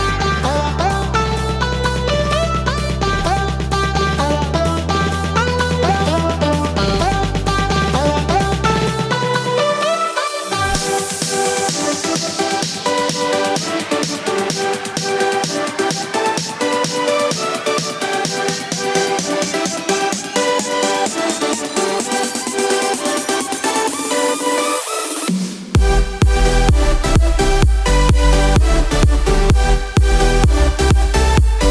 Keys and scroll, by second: 5.3 ctrl+j, 6.3 ctrl+z, 9.1 ctrl+z, 11.5 ctrl+j, 24.5 ctrl+z.